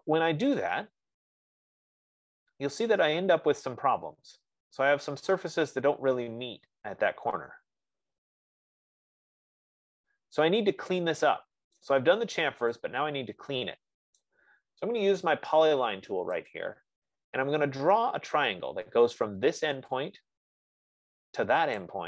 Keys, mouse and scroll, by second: 1.3-3.1 scroll, 12.1 right click, 14.7 right click, 16.9 click, 20.4 click.